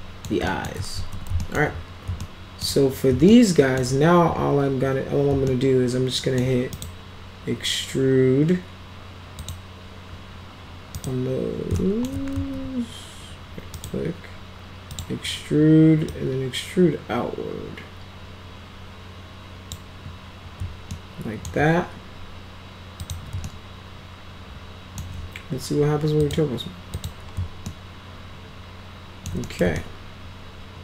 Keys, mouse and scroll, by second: 0.5 alt+middle click, 1.0 ctrl+z, 1.4 alt+middle click, 2.2 alt+middle click, 3.3 alt+middle click, 5.5 alt+middle click, 6.8 right click, 9.4 click, 11.0 right click, 11.8 alt+middle click, 12.4 ctrl+z, 13.8 right click, 15.0 click, 16.1-19.8 drag, 20.9 alt+middle click, 23.0 click, 23.5-25.0 alt+middle drag, 26.2 click, 27.0 click, 27.7-29.3 alt+middle drag, 29.5 middle click, 29.8-30.8 alt+middle drag.